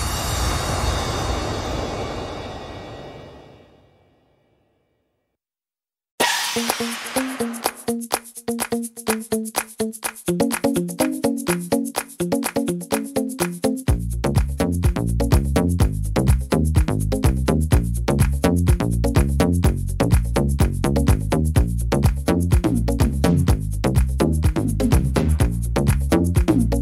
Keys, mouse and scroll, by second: 1.0 right click, 1.9 click, 2.9 click, 4.5 right click, 5.5 e, 8.0 click, 9.3 click, 10.8 scroll up 1, 10.8 middle click, 12.1 middle click, 13.4 click, 14.9 click, 16.7 s, 23.6 middle click, 25.8 middle click.